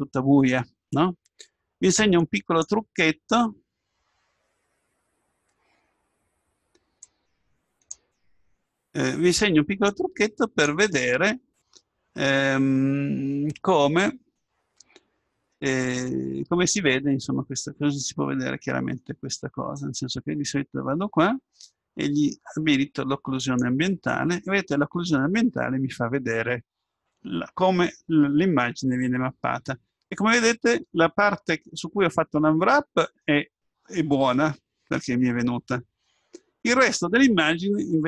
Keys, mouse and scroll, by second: 18.3-21.2 middle drag, 19.8-22.8 drag, 23.4-25.2 drag, 30.8-34.2 middle drag.